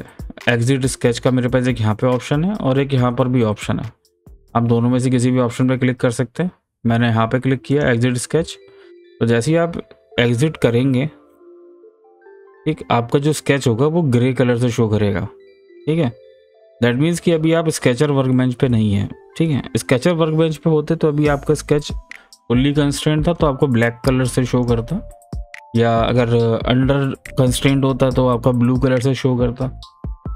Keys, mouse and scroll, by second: 7.7 click, 10.7 middle click, 11.9 click.